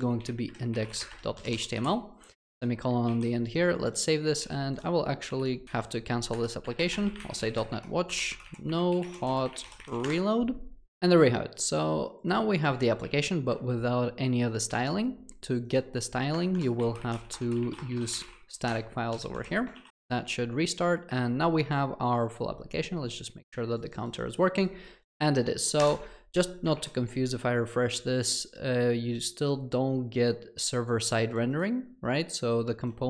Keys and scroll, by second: 18.8 Return.